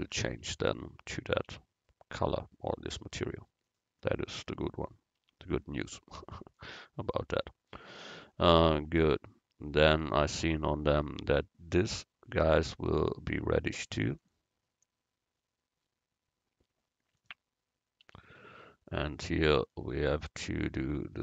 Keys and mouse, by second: 0.5 Tab, 1.5 u, 5.3 Tab, 10.2-12.5 right drag, 12.5 Tab, 14.3-16.2 drag, 18.3 Tab.